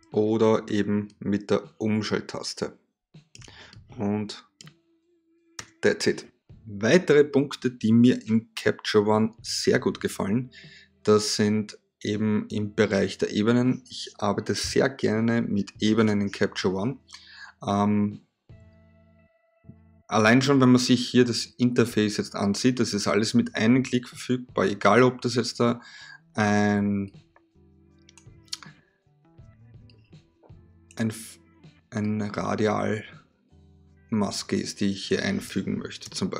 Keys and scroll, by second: 5.1 v.